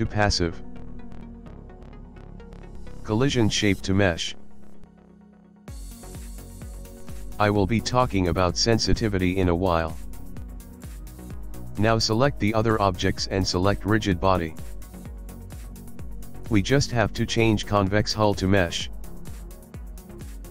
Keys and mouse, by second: 1.7 click, 2.7 click, 5.2 click, 7.0 click, 7.8 click, 12.8 click, 15.1 click, 16.1 click, 17.8 click, 19.8 click.